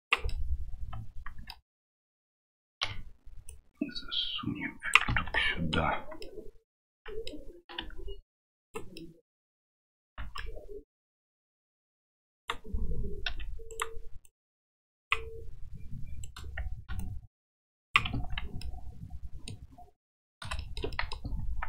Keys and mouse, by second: 0.4-1.5 middle drag, 2.8 l, 3.6-5.1 drag, 5.1 Tab, 5.3 middle drag, 6.2 middle click, 7.0 middle click, 7.8 q, 8.9 middle click, 10.6 middle click, 11.7 middle click, 12.3 right click, 13.7 right click, 14.2 click, 16.2 right click, 17.0 click, 18.1 Tab, 18.6-19.2 middle drag.